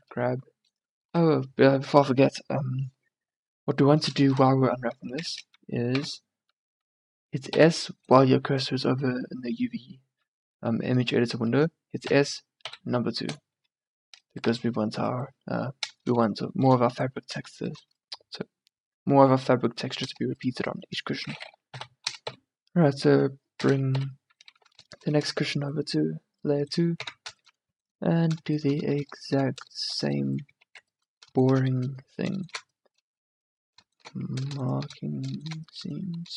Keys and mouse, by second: 3.4-5.3 middle drag, 5.3 Tab, 6.0 a, 7.6 s, 12.1 s, 13.7 Tab, 14.5 a, 21.9 m, 24.1 2, 25.4 a, 27.1 Tab, 29.5 click, 30.7 ctrl+z, 35.3 click, 35.7-36.3 middle drag.